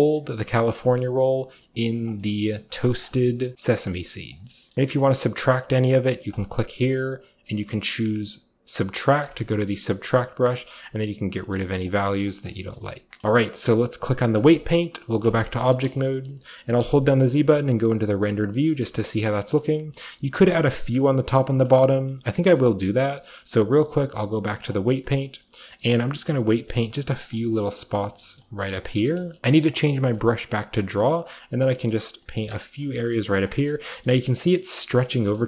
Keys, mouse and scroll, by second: 9.6-11.3 scroll up 1, 9.6-11.3 middle drag, 10.5 click, 11.5 middle click, 12.3-12.7 scroll down 1, 12.7-13.0 scroll up 1, 15.6-17.2 shift+drag, 15.6 typing, 17.2 typing, 18.7 typing, 18.9-19.5 scroll up 1, 19.5-20.5 scroll up 1, 21.4-22.1 typing, 21.6-23.4 right drag, 23.4-25.7 drag, 25.0-25.7 scroll up 1, 25.5-26.2 typing, 25.7-26.1 scroll up 1, 27.4-28.0 scroll up 1, 27.8-29.1 typing, 28.0 scroll down 1, 28.0-29.4 drag, 30.0-32.3 drag, 31.0 middle click, 31.8 middle click, 33.3 click, 34.0-34.8 scroll up 1, 34.8 click, 35.1 click, 35.1-35.4 scroll up 1.